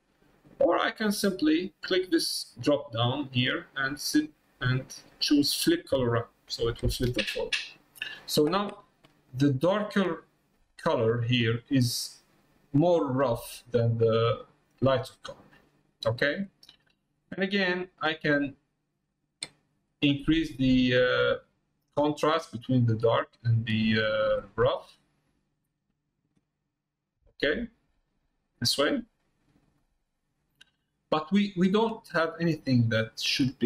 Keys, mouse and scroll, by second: 1.0 click, 3.2 click, 4.7-6.2 drag, 14.9-16.0 middle drag, 17.8-19.9 drag, 20.7-23.7 drag, 24.3 click, 26.4 middle click, 27.7 middle click, 28.9 middle click, 29.9 middle click, 30.7 middle click, 31.5 middle click.